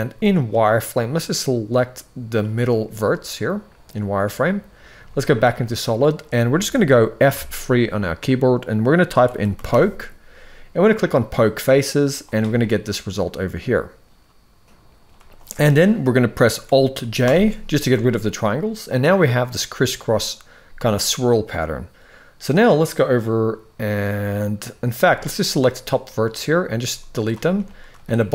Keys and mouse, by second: 0.7-2.0 drag, 4.6 z, 7.0 F3, 17.0 alt+j, 24.7 z, 25.5 click, 26.5 x, 27.4 shift+middle click, 27.8 click.